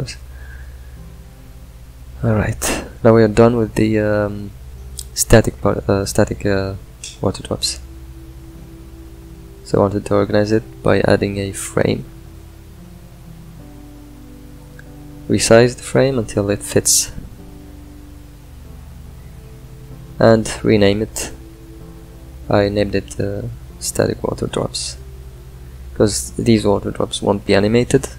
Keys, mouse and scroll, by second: 0.8 click, 4.2 click, 20.5 click, 22.3 n, 23.0 click.